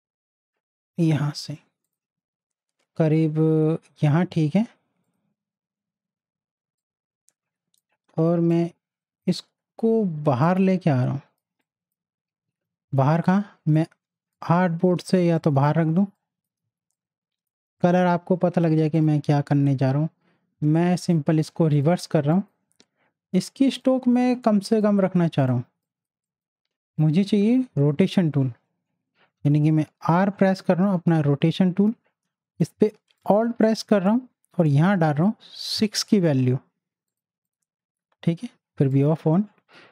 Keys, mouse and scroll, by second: 5.0 click, 6.4 space, 6.8 click, 6.8 space, 8.5-11.6 drag, 11.6 space, 11.6 click, 14.3 click, 15.3 space, 15.3 click, 16.6 z, 16.9 click, 25.7 space, 25.8 click, 30.0 r, 33.2 alt+click.